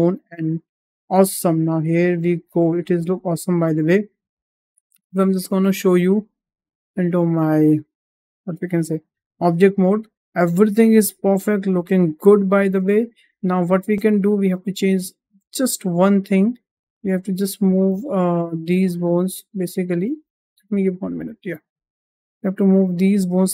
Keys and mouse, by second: 0.2 shift+middle click, 0.8 middle click, 1.2 shift+middle click, 1.7 middle click, 2.8 shift+middle click, 3.0 middle click, 5.2 click, 6.7-7.1 middle drag, 7.6 shift+middle drag, 8.0-9.5 middle drag, 10.1-12.0 middle drag, 12.6 `, 13.6 shift+middle drag, 14.0 `, 15.4 shift+middle drag, 16.8 click, 17.0 Tab, 17.6 click, 17.9 Tab, 18.6 Tab, 19.0 Tab, 20.2 Tab, 20.6 click, 20.9 Tab, 21.8 Tab, 22.3 click, 23.2 g.